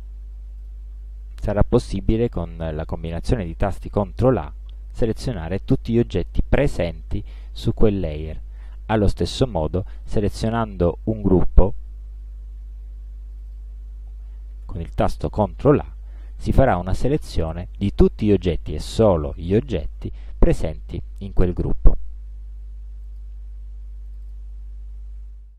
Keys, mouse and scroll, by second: 0.6 click, 4.3 ctrl+a, 8.6 click, 9.8 click, 10.8 click, 13.4 click, 14.7 ctrl+a, 23.1 click, 24.1 click.